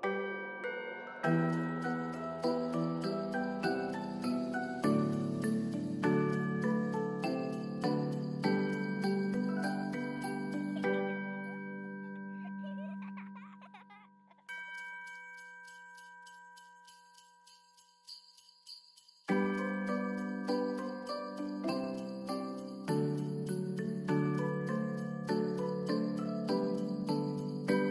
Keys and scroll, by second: 1.1 ctrl+s, 2.4 ctrl+k, 4.9 Return.